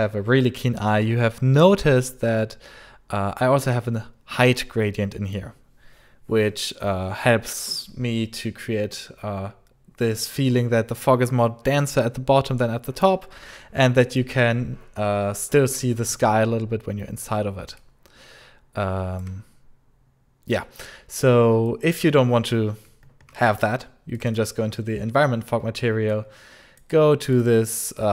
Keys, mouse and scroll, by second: 16.6 scroll, 16.6 scroll up 1, 17.2-17.5 scroll, 17.5 scroll up 1, 17.6 alt+click, 17.6 scroll, 18.0 alt+click, 18.1 alt+click, 18.1 alt+click, 18.1 alt+click, 18.2 alt+click, 18.2 alt+click, 20.5 scroll down 1, 21.5 alt+click, 22.4 scroll down 1, 23.0 scroll down 1, 23.9 scroll down 1, 24.0 click, 24.1 click, 24.8 alt+scroll, 26.0 click, 27.2 click.